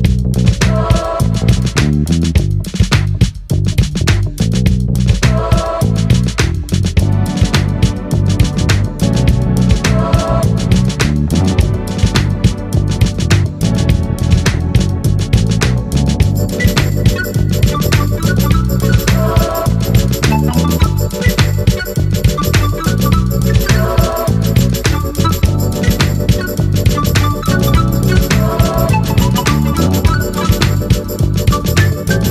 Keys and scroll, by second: 19.7 ctrl+z.